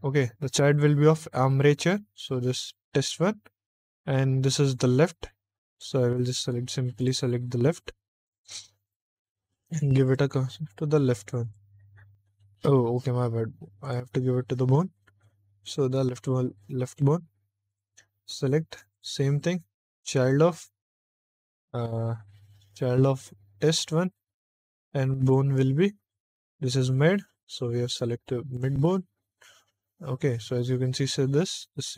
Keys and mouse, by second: 0.6 click, 2.6 click, 5.6 click, 6.9 click, 9.9 click, 11.3 click, 13.7 click, 15.5 click, 16.7 click, 17.6 click, 18.8-20.0 drag, 22.6 click, 23.5 click, 25.1 click, 28.4 click.